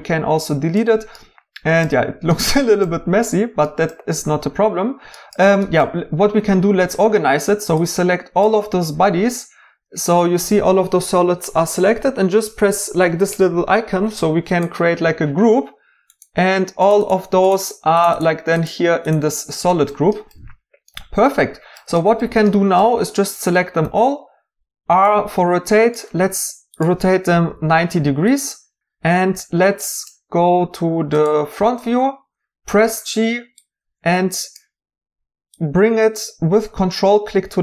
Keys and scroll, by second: 23.8 r, 27.4 typing, 31.6 g.